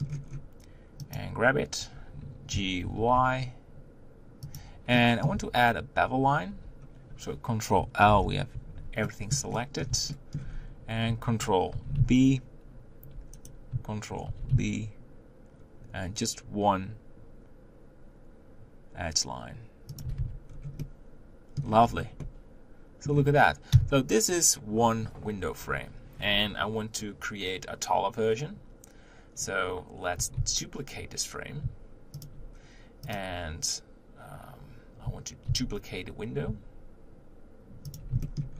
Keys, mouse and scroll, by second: 0.2-1.1 scroll up 2, 1.1 click, 1.8 scroll up 1, 2.5 g, 5.0 middle click, 5.4 Tab, 6.5 1, 8.0 ctrl+1, 9.1-10.5 shift+middle drag, 10.5-11.0 scroll up 2, 11.7 ctrl+b, 14.2 ctrl+b, 20.2 Tab, 20.4-20.8 scroll down 2, 20.8-21.8 middle drag, 21.8-22.2 scroll down 5, 22.2-23.7 middle drag, 23.7 KP_1, 30.5 shift+d, 33.1 click, 35.5 shift+d, 38.2 shift+middle click.